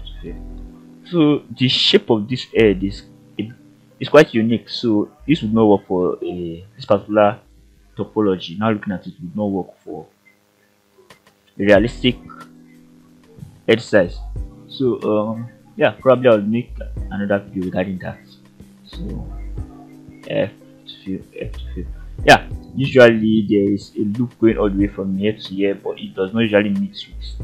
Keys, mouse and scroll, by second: 0.3 f, 0.7-1.0 scroll down 2, 1.2 shift+middle click, 1.7-3.2 middle drag, 3.4-3.8 scroll up 2, 4.3 click, 4.7 scroll down 2, 5.2 shift+middle click, 5.7 middle click, 6.2 scroll up 2, 6.8 shift+middle click, 8.3 ctrl+right click, 9.0-9.3 scroll down 2, 9.5-10.8 middle drag, 11.0 scroll up 2, 11.7 shift+middle click, 13.3 ctrl+right click, 18.3 click, 19.1 shift+click, 19.7 f, 23.2 middle click, 25.2 scroll down 1.